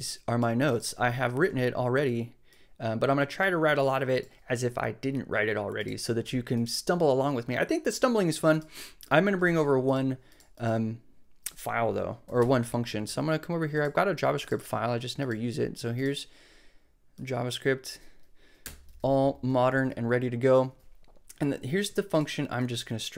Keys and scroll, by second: 12.2 super+k, 12.4 super+b, 18.6 BackSpace.